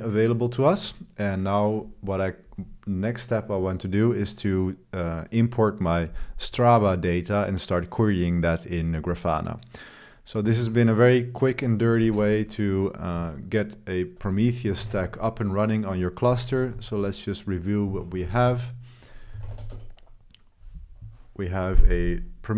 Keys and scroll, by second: 10.5 super+3, 10.7 super+3, 12.0 ctrl+b, 13.1 3, 14.8 ctrl+b, 15.0 4, 16.5-20.0 typing, 17.0 Return.